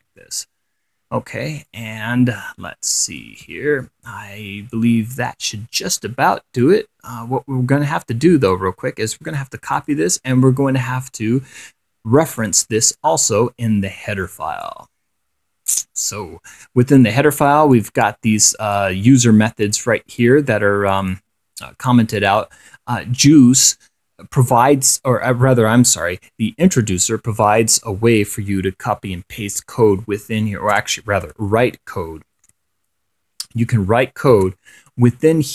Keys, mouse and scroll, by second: 0.6 click, 1.9-5.2 drag, 6.9-9.0 drag, 9.4 ctrl+c, 10.0 ctrl+click, 12.4 click, 14.0 scroll down 2, 14.8-16.2 drag, 17.2 click, 18.0 click, 19.0-20.7 drag, 20.7-21.2 scroll up 1, 21.2 click, 22.4 click, 31.0 Return, 31.5 shift+7, 33.6 7, 34.0 1, 34.6 ctrl+v.